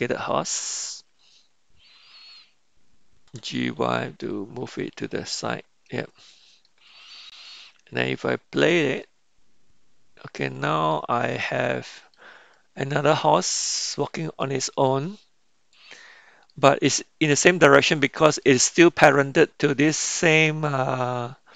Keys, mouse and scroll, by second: 5.0 g, 6.9-8.5 middle drag, 8.5 click, 10.6-11.1 middle drag, 11.8-12.7 shift+middle drag, 12.8 middle click, 14.3-15.4 middle drag, 15.9-16.7 middle drag, 18.1-18.8 shift+middle drag.